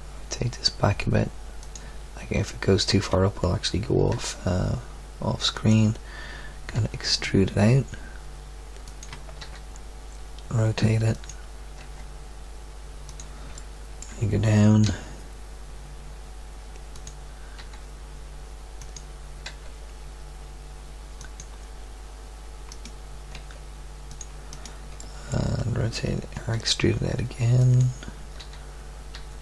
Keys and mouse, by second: 4.1 g, 6.7 e, 9.4 r, 11.8 g, 13.8 click, 14.8 e, 14.8 click, 17.6 r, 19.4 g, 22.7 click, 23.3 g, 26.3 e, 28.4 r, 29.1 r.